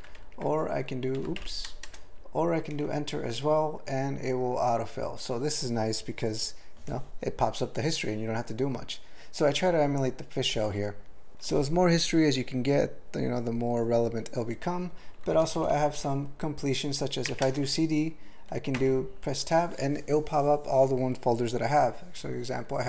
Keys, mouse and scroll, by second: 0.2 ctrl+/, 1.0-1.8 typing, 2.7 Return, 15.4 alt+BackSpace, 17.3 typing, 18.8 Tab.